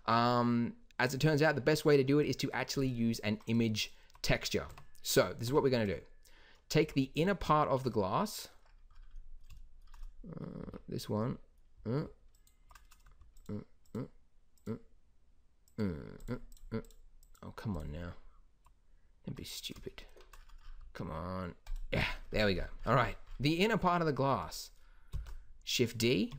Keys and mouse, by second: 4.6 Tab, 5.4 Tab, 6.8 z, 7.9 middle click, 8.4 middle click, 10.6 z, 19.5 middle click, 21.6-23.1 drag, 25.1 shift+d.